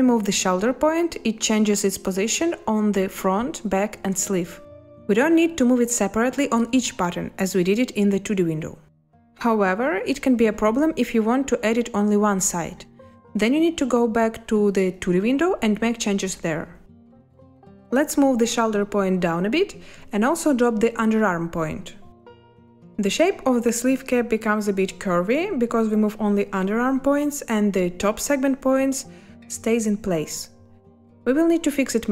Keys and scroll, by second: 15.1 space, 17.4 space.